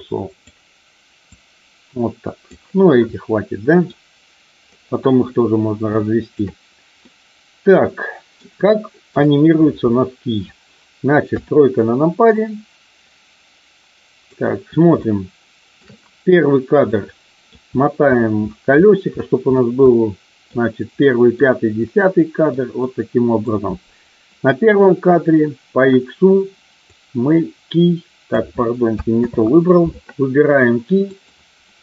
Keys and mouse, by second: 1.3-2.4 drag, 3.2-3.8 middle drag, 5.9-6.3 shift+middle drag, 7.0-8.3 middle drag, 8.5-9.0 shift+middle drag, 11.2 KP_3, 12.3-14.0 middle drag, 14.9-15.8 shift+middle drag, 16.9 middle click, 19.8 middle click, 20.9 middle click, 21.8 middle click, 22.8 middle click, 26.8-28.3 drag, 29.3 ctrl+z, 31.0 click.